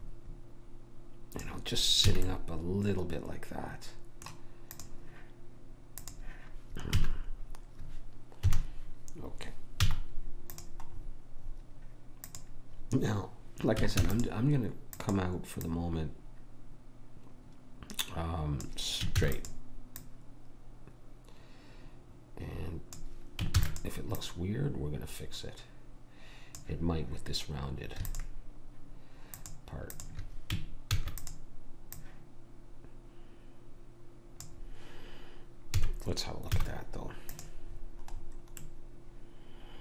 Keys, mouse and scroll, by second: 2.1 a, 4.7-7.8 drag, 7.0 a, 8.4 KP_1, 9.8 z, 12.3 click, 14.1 shift+d, 15.2-17.3 drag, 19.2 shift+d, 20.0 click, 23.6 shift+d, 24.2 click, 28.1-31.8 drag, 30.9 shift+d, 32.0 click, 35.8 a, 36.5 z, 38.7-39.8 middle drag.